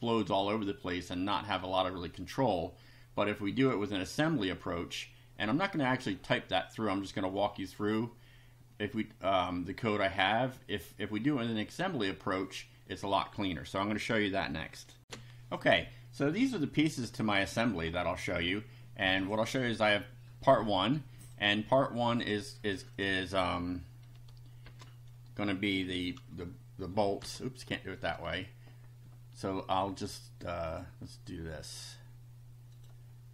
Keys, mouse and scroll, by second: 0.1 click, 10.1 click, 15.0 ctrl+r, 19.2 click, 21.2 click, 22.2 click, 23.0 click, 24.7 shift+3, 26.1 F5, 27.2 BackSpace, 30.7 click, 32.7 click.